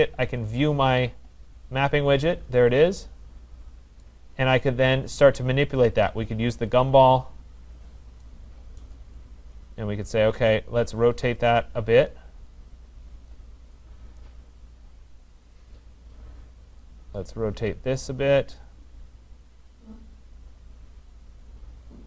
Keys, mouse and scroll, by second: 0.9 click, 2.3-3.2 scroll, 4.0 right click, 6.8 click, 8.8 right click, 9.8 middle click, 9.9 middle click, 13.3 click.